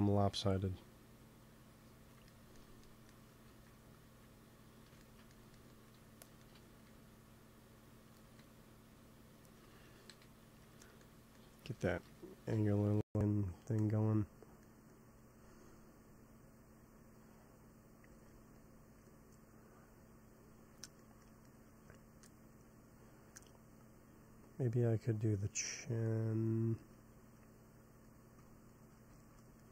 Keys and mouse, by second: 2.2-3.4 drag, 3.4 ctrl+s, 6.7 f, 7.2-10.6 drag, 8.1 f, 10.0 KP_1, 12.4 x, 12.5 f, 13.0-15.5 drag, 18.0 ctrl+s, 23.0 middle click, 23.7-25.6 drag, 25.9-27.7 middle drag, 28.6-29.7 middle drag.